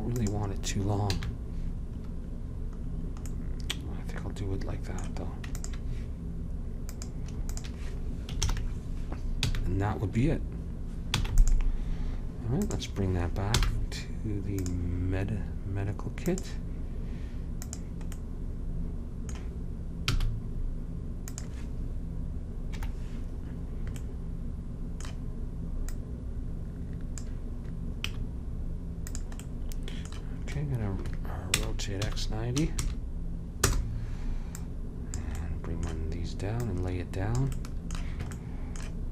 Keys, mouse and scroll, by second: 1.2 a, 5.7-8.5 drag, 8.5 ctrl+j, 9.6 a, 11.2 ctrl+s, 12.8-14.6 drag, 13.6 m, 16.3-19.5 drag, 20.1 s, 22.9 KP_Decimal, 26.0-27.9 drag, 28.2 s, 29.5 middle click, 31.7 r, 34.7-36.5 drag, 35.5 middle click, 35.5 right click, 36.5 middle click, 36.7-38.5 drag, 37.7-39.0 middle drag.